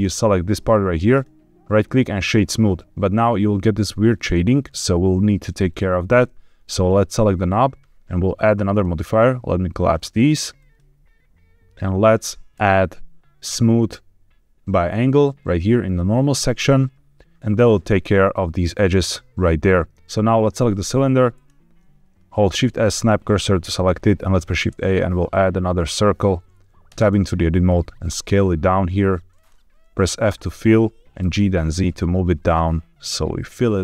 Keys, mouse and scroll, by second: 1.0 right click, 6.7 click, 8.6 click, 9.7 click, 10.5 click, 12.4-15.9 drag, 19.9 click, 20.5 click, 21.2 click, 22.4 shift+s, 24.2 shift+a, 26.8 Tab, 27.6 s, 29.2 click, 30.2 f, 31.1 g, 31.3 z.